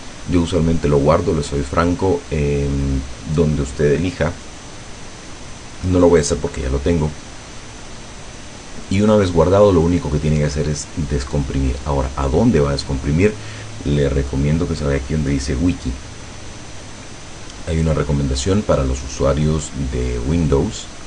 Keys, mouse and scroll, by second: 5.8 click, 12.1 click, 17.5-19.8 drag, 20.5 click.